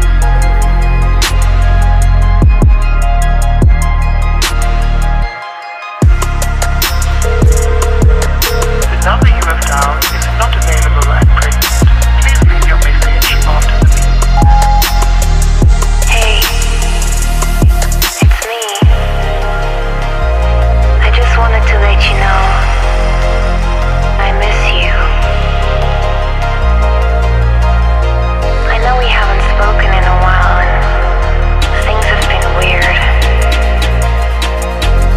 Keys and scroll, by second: 2.2 Up, 3.5 Down, 5.4 space, 10.1 space, 11.8 ctrl+g, 15.0 Up, 16.4 space, 18.1 Up, 19.8 r, 22.2-24.0 typing, 22.5 Tab, 23.4 Tab, 24.2 Return, 25.3 alt+Left, 28.1 Delete, 33.6 Down.